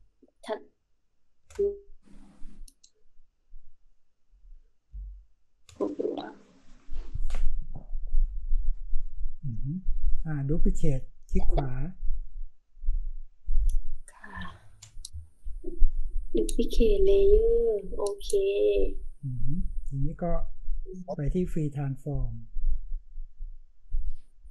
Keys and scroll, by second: 4.8 space.